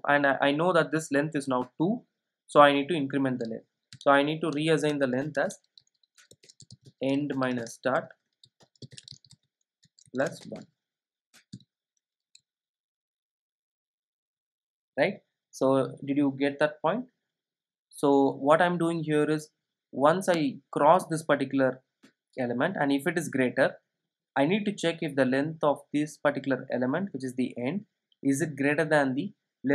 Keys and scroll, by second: 4.5 Return, 12.9 super+s.